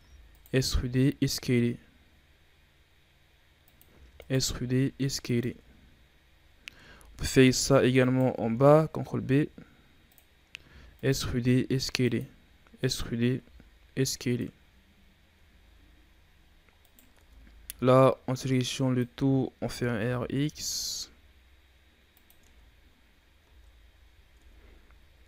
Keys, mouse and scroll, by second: 0.7 s, 3.8 e, 4.4 s, 5.4 Tab, 5.8-6.3 scroll down 5, 6.3-6.7 scroll up 6, 6.7 Tab, 7.9 alt+right click, 9.1 ctrl+b, 10.6 e, 11.3 s, 12.2 e, 13.3 s, 14.4 Tab, 14.8-15.3 scroll down 5, 15.3 a, 15.5-16.2 scroll down 3, 16.2-16.7 scroll up 7, 16.7 right click, 17.0 Tab, 17.5 a, 17.6 a, 18.3-19.5 drag, 19.5 r, 22.3 Tab, 22.7-23.3 scroll down 6, 23.3 a, 24.1 ctrl+z, 24.3 Tab, 24.7-25.2 scroll down 3.